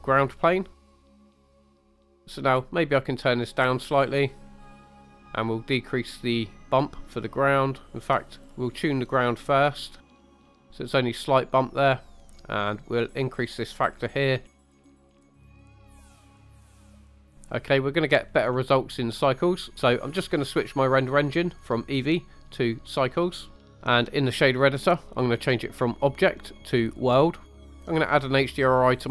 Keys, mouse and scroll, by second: 0.8-2.2 drag, 2.8 click, 5.2-10.7 drag, 12.5 click, 16.9 click, 17.1 scroll down 2, 17.6-18.1 middle drag, 18.6 scroll up 2, 19.1 shift+middle drag, 19.6 middle click, 21.8-23.1 drag, 23.6 scroll down 2, 25.9-27.1 drag, 27.5 middle click, 27.6 scroll up 1.